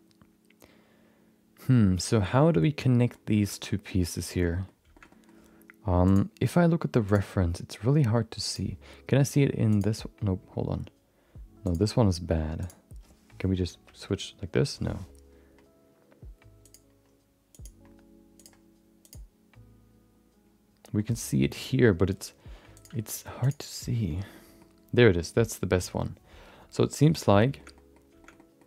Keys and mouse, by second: 2.9 middle click, 3.4 shift+middle click, 3.6 middle click, 4.3 shift+middle click, 4.5 middle click, 4.9 shift+middle click, 6.2-7.4 drag, 8.4 click, 11.6 click, 13.8 Down, 18.3 click, 21.1 middle click, 22.7 click, 24.3 middle click, 27.5 shift+middle click, 27.7 middle click, 28.2 shift+middle click, 28.3 middle click.